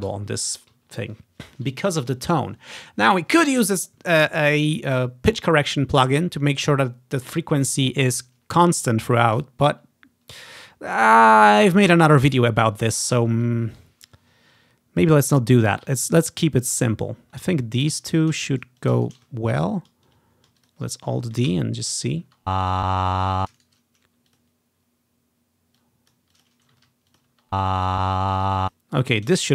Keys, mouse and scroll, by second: 0.2 Delete, 0.3-0.9 scroll down 1, 0.9-1.4 scroll up 1, 1.4-2.9 scroll down 1, 10.5 click, 11.3-12.8 ctrl+scroll up 2, 11.5 ctrl+click, 13.2-13.6 scroll up 1, 13.7 scroll down 1, 14.1 scroll up 2, 15.0-15.9 scroll up 4, 16.7-17.3 scroll up 2, 17.3-18.5 drag, 17.3 space, 17.3 s, 18.1 s, 18.9 shift+click, 19.4-20.5 scroll up 2, 20.5 scroll down 2, 20.7-21.8 drag, 21.3 scroll down 1, 21.6 alt+d, 22.2 click, 22.4 space, 23.4 space, 23.5 click, 23.7 shift+middle click, 24.4 click, 25.9 click, 26.6 alt+click, 26.9 alt+d, 27.3-29.2 alt+drag, 27.4 space, 28.6 space.